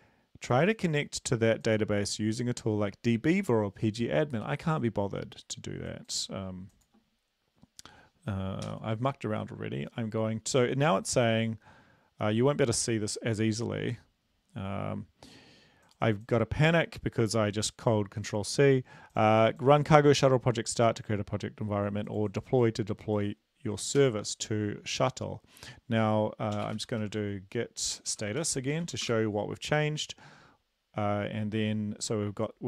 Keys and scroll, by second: 9.1 ctrl+c, 24.3 ctrl+l, 26.6-28.9 typing, 29.3 Return.